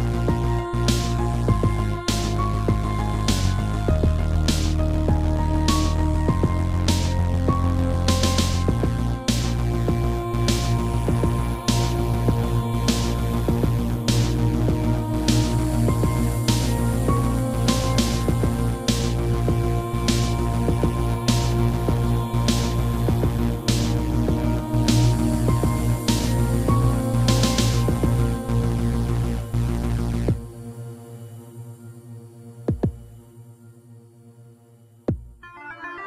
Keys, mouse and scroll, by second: 0.9 click, 2.2 click, 2.7 click, 6.2 shift+click, 9.5 shift+click, 10.4 shift+click, 12.4 shift+click, 13.3 7, 15.1 g, 17.5 click, 18.2 Left, 18.6 Right, 18.9 Right, 19.6 Left, 19.9 Left, 20.3 Right, 21.1 Left, 21.6 Right, 21.6 Left, 22.6 shift+middle click, 23.1 middle click, 24.1 middle click, 25.3 shift+middle click, 25.5 middle click, 26.0 Left, 26.4 Right, 27.5 middle click, 28.3 Left, 29.2 scroll up 1, 29.3 middle click, 30.4 scroll up 1, 31.4 click, 31.5 click, 32.2 middle click, 34.1 7, 35.6 g.